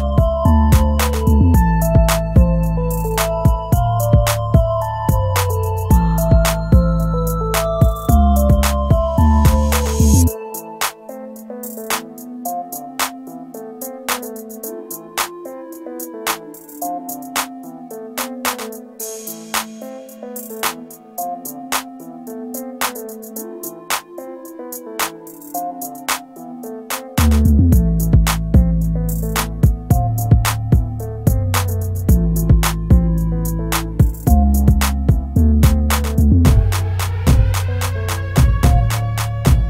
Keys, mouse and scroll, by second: 6.7 p, 9.1 shift+click, 12.6 shift+click, 16.2 shift+click, 27.4 shift+click.